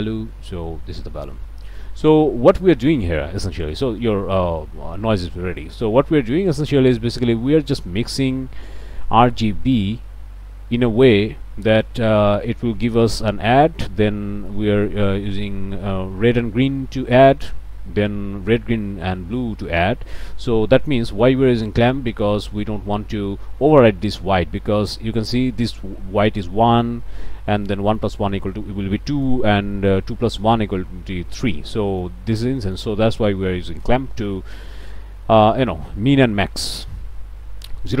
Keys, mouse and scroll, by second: 1.9 scroll down 1, 2.6 middle click, 3.0-3.5 scroll down 1, 3.8 scroll down 1, 4.4-4.8 scroll up 1, 5.1 scroll up 1, 5.5 middle click, 6.2 scroll down 1, 6.5 middle click, 8.2 middle click, 9.3 middle click, 14.5 middle click, 15.4-16.0 scroll down 2, 17.3 middle click, 20.0 middle click, 20.9 middle click, 24.4 click, 27.7 click, 28.5 click, 29.8 click, 31.6 click, 32.6 click.